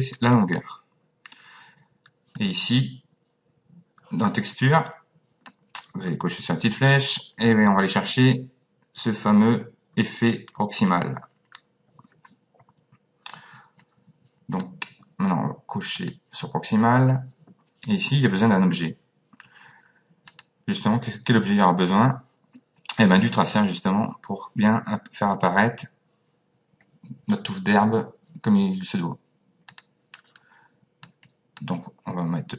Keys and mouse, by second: 0.4 click, 5.5 click, 13.3 click, 16.0 click, 20.3 click, 29.7 click, 31.0 click.